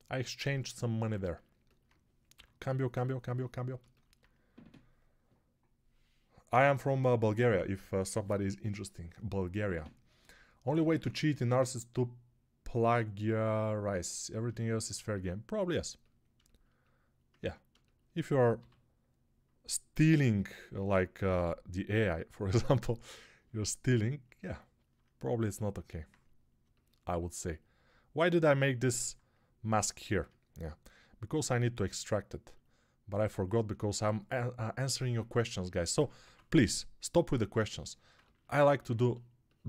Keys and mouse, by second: 2.2 6, 18.4 g, 20.0 g, 31.2 q, 34.8 ctrl+Tab, 36.1 6.